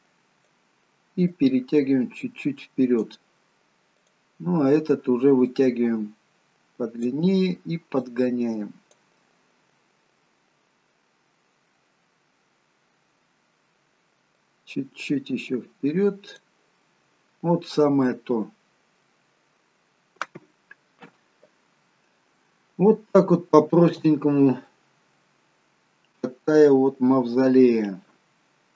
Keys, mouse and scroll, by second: 1.5 click, 4.1 click, 8.3 click, 10.1-11.1 scroll down 1, 11.9-12.8 scroll down 1, 14.6 click, 17.8 middle click, 17.8-18.8 scroll down 1, 18.8-19.2 scroll up 3, 19.2 middle click, 22.5 shift+middle click, 24.8 middle click.